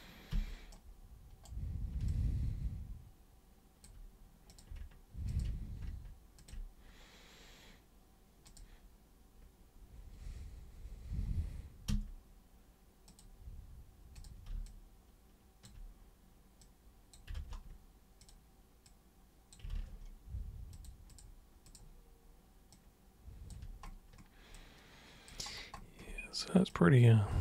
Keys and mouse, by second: 0.3 super+g, 0.6 super+right click, 2.0-3.8 alt+super+drag, 4.4 super+click, 5.3 ctrl+shift+super+click, 6.3 ctrl+shift+super+click, 8.4 super+click, 11.8 super+w, 13.0 super+click, 14.1 super+click, 14.6-15.6 alt+super+drag, 16.6 super+click, 18.2 super+click, 18.8 super+click, 19.7 ctrl+super+z, 20.7 super+click, 21.0 super+click, 21.6 super+click, 22.7 super+click, 24.5 alt+super+click, 26.6-27.4 super+drag.